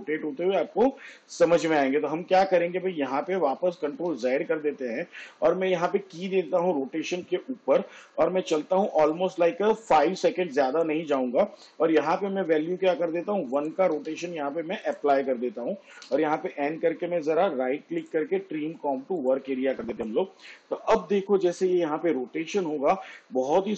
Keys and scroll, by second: 4.6 ctrl+z, 14.3 1, 16.4 n.